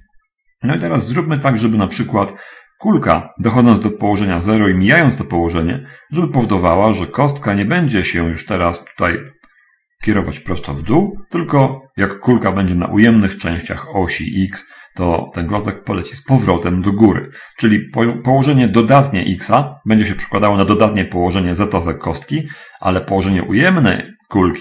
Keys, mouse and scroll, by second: 1.2 right click, 1.9-9.7 drag, 18.4-24.6 drag.